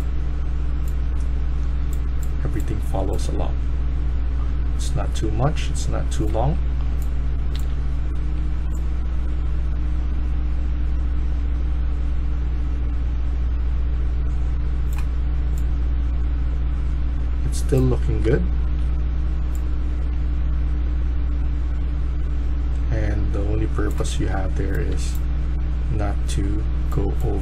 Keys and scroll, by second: 6.3-7.9 typing, 17.6-19.1 typing, 23.9-24.3 typing.